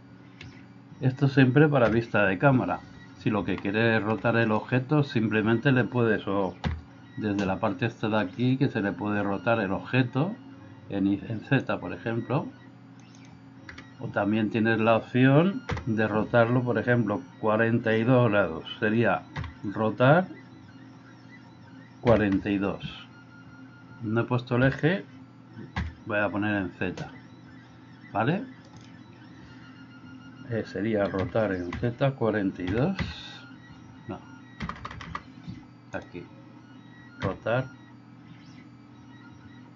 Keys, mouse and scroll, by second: 0.4 KP_4, 1.9 KP_1, 3.7 shift+middle click, 6.7 n, 11.7-13.0 drag, 13.2-15.7 drag, 19.5 r, 28.8-35.9 drag, 34.8 BackSpace, 35.0 BackSpace, 37.2 r.